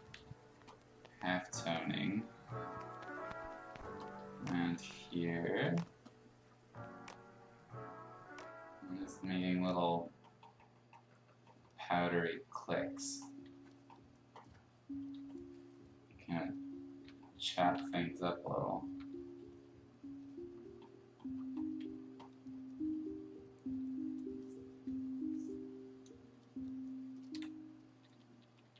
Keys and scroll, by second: 0.1 ctrl+z, 13.5 x, 15.1 x, 17.0 x, 17.7 ctrl+z, 18.9 x, 21.8 x, 27.9-28.7 typing.